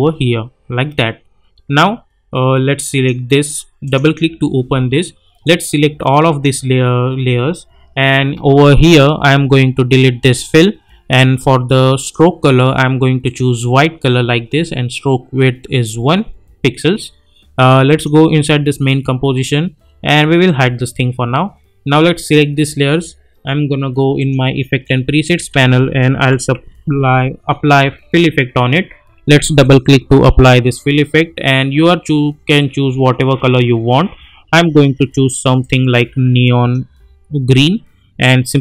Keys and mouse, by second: 17.8 click, 20.4 click, 25.5 ctrl+a, 25.9-28.0 typing, 29.6 click, 32.5-38.4 drag, 35.9-36.8 click.